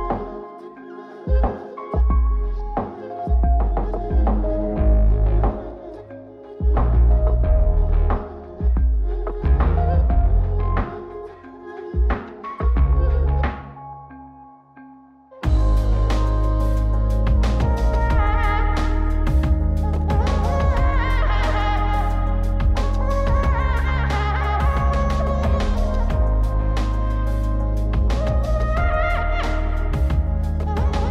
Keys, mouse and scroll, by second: 0.5-1.5 drag, 1.7-3.7 drag, 4.5 click, 5.9 click, 7.0 click, 8.7-10.0 middle drag, 11.0 click, 12.1 click, 13.0 click, 13.8 scroll up 3, 14.1 middle click, 17.0-19.1 drag, 19.2-21.6 drag, 24.5-26.4 drag, 26.7-28.5 drag.